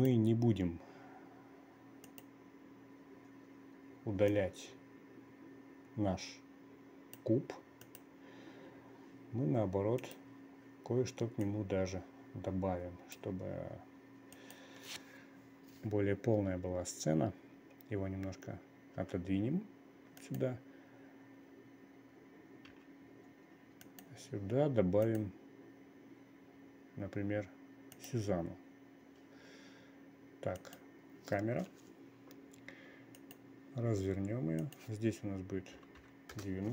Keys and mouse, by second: 0.5 click, 2.5 click, 4.9-7.8 drag, 8.3 click, 10.5 click, 12.1-13.7 drag, 14.9 click, 19.5 g, 23.2 g, 25.5-28.7 drag, 31.1 click, 33.7 click, 35.3-36.7 drag.